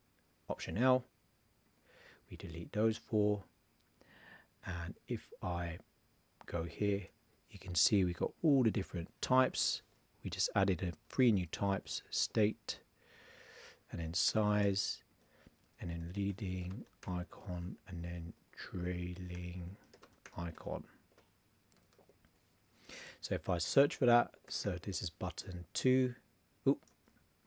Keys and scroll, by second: 0.5 alt+l, 9.2 shift+t, 10.9 super+a, 11.8 shift+s, 14.0 shift+s, 15.2 super+a, 15.9 shift+l, 17.0 shift+i, 18.3 super+a, 18.8 shift+t, 20.2 shift+i, 23.7 shift+i.